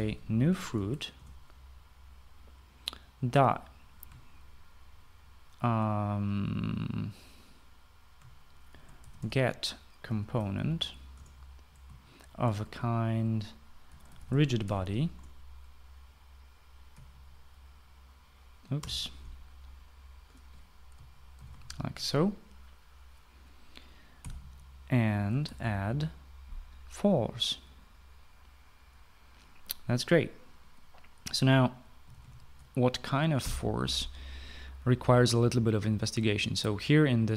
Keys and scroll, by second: 0.2-1.4 typing, 1.8 Return, 3.9 ., 9.1-15.7 typing, 15.8 Return, 17.5 ', 19.4 BackSpace, 21.7-22.5 typing, 24.6-26.7 typing, 32.4-34.0 typing.